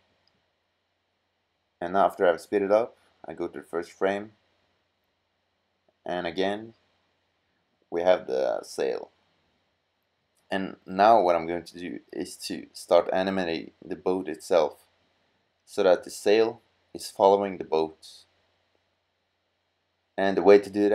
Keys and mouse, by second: 1.6-4.0 drag, 4.9 drag, 5.5 middle click, 6.5-6.9 drag, 8.6 middle click, 10.1 middle drag, 11.6 middle click, 13.8-14.9 middle drag.